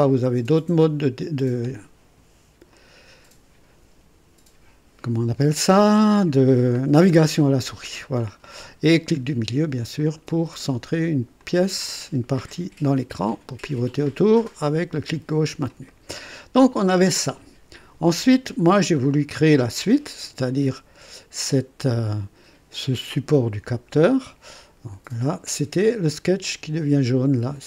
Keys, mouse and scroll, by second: 0.0 click, 2.7 click, 6.9 scroll down 2, 7.8 scroll up 2, 8.4 right click, 9.9 middle click, 10.6 middle click, 11.4-15.8 drag, 15.9 right click, 19.0-20.6 drag.